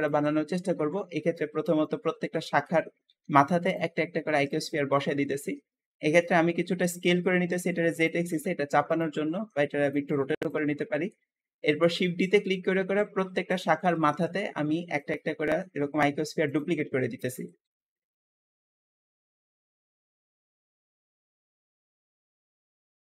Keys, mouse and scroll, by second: 0.6 KP_7, 0.7 7, 1.5-2.9 shift+middle drag, 2.9 g, 4.2 KP_1, 4.3 1, 5.1 shift+middle click, 5.4 scroll up 2, 5.8 shift+middle click, 6.7 s, 8.2 g, 9.2 r, 9.8 g, 11.0 KP_7, 11.8 scroll down 2, 12.1 shift+middle click, 12.7 shift+d, 13.9 KP_1, 14.1 1, 14.8 shift+middle click, 15.2 scroll up 1, 15.4 g, 17.5-23.1 typing, 18.6 scroll up 2, 18.7 shift+middle click, 20.8 scroll down 1, 20.9 shift+middle click, 22.9 shift+middle click.